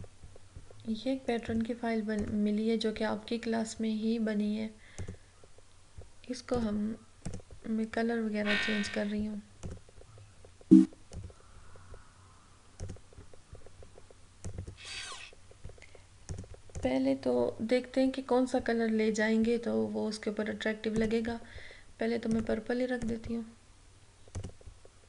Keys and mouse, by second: 5.1 click, 9.7 click, 20.9-25.0 drag.